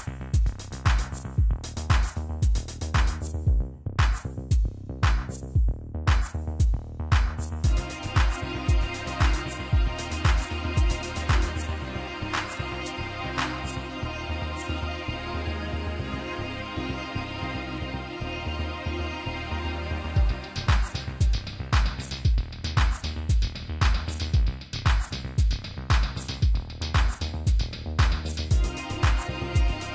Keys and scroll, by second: 14.1 shift+r, 15.8 shift+r, 16.0 shift+f, 17.6 shift+s, 18.7 shift+s, 19.8 shift+u.